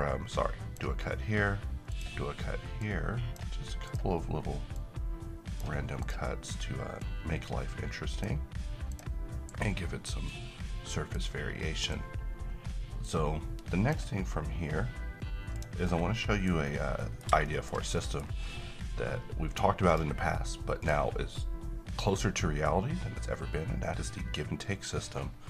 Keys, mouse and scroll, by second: 15.8 scroll down 1, 16.1 middle click, 16.6 scroll up 1, 17.0 middle click, 19.9 click, 21.3-22.3 middle drag.